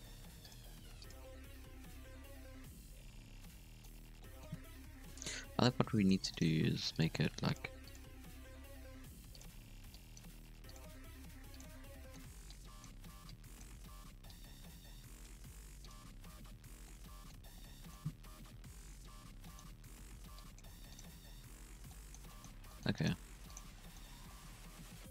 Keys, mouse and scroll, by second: 0.0-0.6 typing, 1.2-2.2 scroll down 2, 1.5 Tab, 2.2-3.9 middle drag, 3.9 scroll up 2, 4.1-4.9 middle drag, 4.9 KP_3, 5.0 Tab, 5.4 scroll up 2, 5.6 z, 6.0 alt+a, 6.3 alt+shift+right click, 6.6-9.0 typing, 9.8 alt+a, 9.9 click, 10.3 r, 10.8 g, 12.0 shift+middle click, 12.5 click, 13.2 click, 14.3-15.5 drag, 15.5 r, 15.9 z, 16.4-16.8 scroll down 3, 16.5 Tab, 16.8-17.4 middle drag, 17.4 scroll up 1, 17.5-18.4 middle drag, 18.4 KP_3, 18.6 Tab, 19.0 scroll up 4, 19.0-19.7 middle drag, 19.2 z, 19.7 alt+a, 20.3 drag, 20.6 g, 21.0 z, 21.4 Tab, 21.8-22.5 middle drag, 22.5 Tab, 22.6 middle drag, 22.9 right click, 23.1 g, 23.7-24.2 scroll down 2, 23.7 middle click, 24.0 Tab, 24.2-25.1 middle drag.